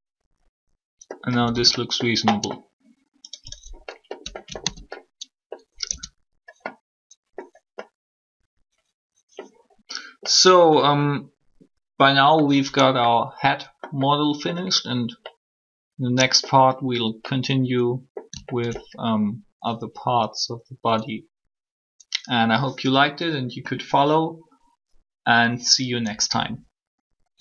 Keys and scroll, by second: 1.3 typing, 5.9 shift+Tab.